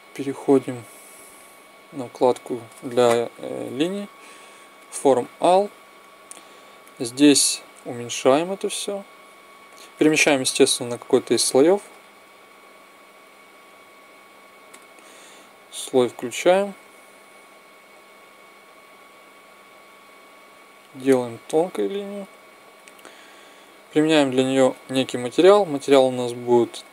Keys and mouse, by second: 0.4-2.1 drag, 3.0 click, 6.0-7.5 right drag, 7.5 click, 7.5 s, 10.1 m, 13.5 s, 14.4-16.9 drag, 16.5 s, 23.1-24.4 right drag, 24.4 middle click.